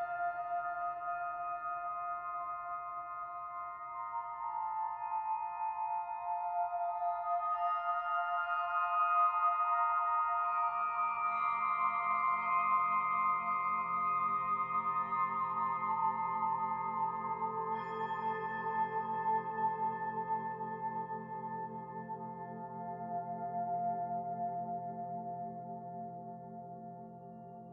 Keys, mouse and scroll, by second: 0.8 Tab, 2.7 click, 4.1 middle click, 5.7 middle click, 6.4 shift+middle click, 7.6 KP_Decimal, 8.3-10.6 scroll down 28, 10.4 middle click, 12.2 click, 14.0 shift+middle click, 15.1 middle click, 15.9 e, 18.5 middle click, 19.7 e, 22.5 middle click, 23.9 click, 24.4 e, 26.0 middle click, 27.2 e.